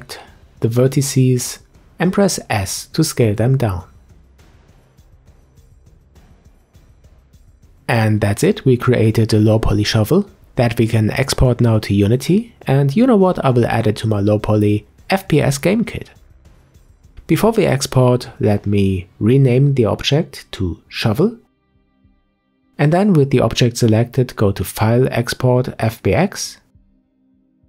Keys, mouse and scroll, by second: 0.2 Tab, 1.4 click, 1.8 shift+click, 2.3 shift+click, 3.2 s, 5.8-6.2 scroll down 4, 6.2 Tab, 6.7-10.4 middle drag, 10.4-13.4 scroll down 2, 16.0 click, 16.6 KP_Decimal, 17.9-21.2 drag, 24.0-27.2 drag.